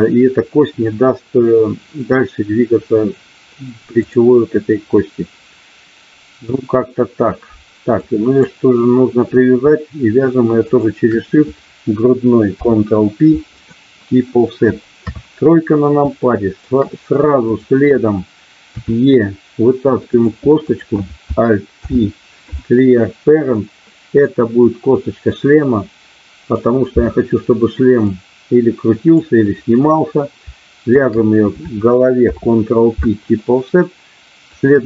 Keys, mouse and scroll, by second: 4.0 click, 8.2 click, 10.7 shift+click, 12.5 ctrl+p, 15.0 KP_3, 16.2 shift+middle click, 17.5 click, 18.8 e, 20.0 click, 20.7 click, 21.8 alt+p, 24.7-26.5 drag, 28.0-29.2 drag, 30.9 shift+click, 32.3 ctrl+p.